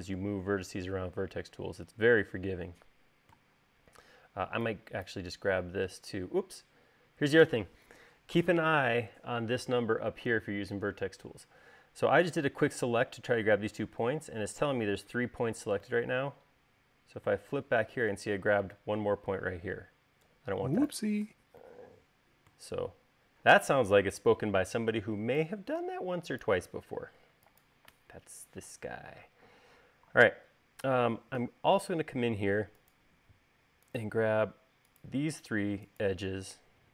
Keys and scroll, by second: 31.9 space.